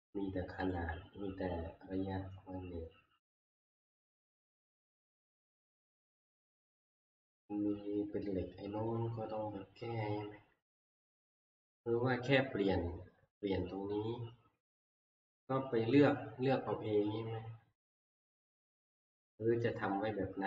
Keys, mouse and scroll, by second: 0.7 click, 1.6-2.7 scroll, 2.7 scroll, 5.0-5.4 scroll, 5.8-6.7 scroll, 6.7-7.8 scroll, 18.0 click, 19.8 click, 20.0 scroll.